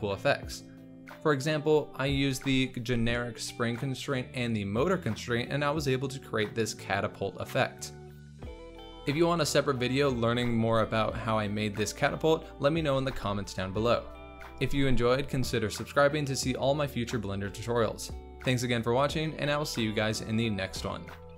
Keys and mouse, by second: 2.0 click, 3.4 click, 8.5 space, 18.6 space.